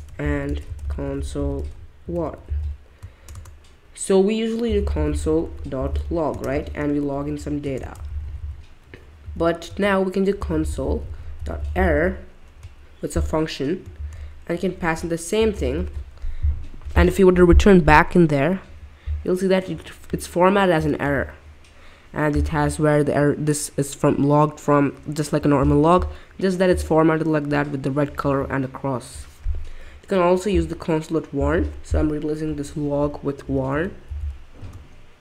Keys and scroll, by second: 0.0-12.5 typing, 13.9 shift+9, 16.5 typing, 27.4 typing, 33.2-34.7 typing.